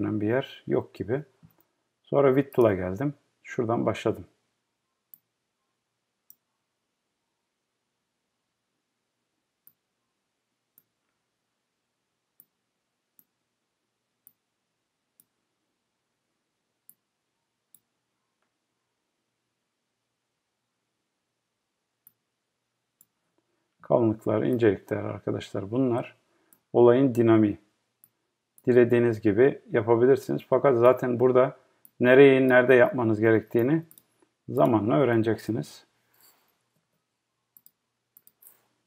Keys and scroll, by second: 35.6 Right.